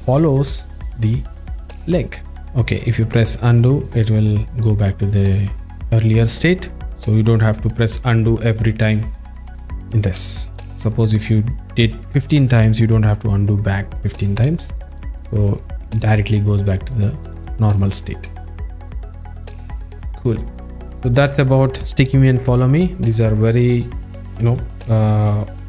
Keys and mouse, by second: 3.0-6.5 drag, 7.1-7.7 drag, 10.2 click, 18.8-19.6 drag, 20.0 alt+shift+middle click, 20.4 ctrl+middle click, 20.8 alt+shift+middle click.